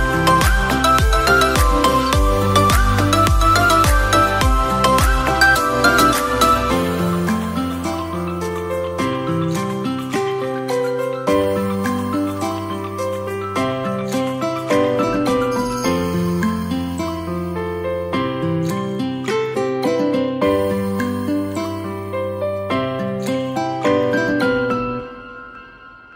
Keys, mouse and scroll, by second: 0.5 click, 2.3-3.2 middle drag, 3.2 click, 4.9-6.5 drag, 6.5 0, 8.6-9.7 drag, 13.6 click, 18.0 shift+d, 19.1 click, 21.5 click, 23.1 r.